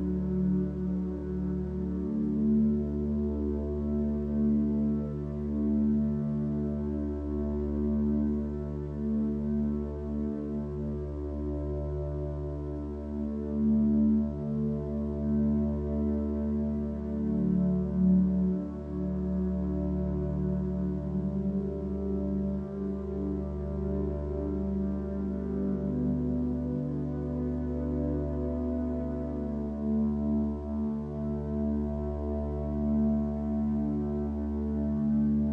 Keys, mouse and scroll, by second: 4.5 ctrl+d, 9.8 ctrl+space, 10.0 click, 11.6 click, 14.3 ctrl+space, 21.3 ctrl+z.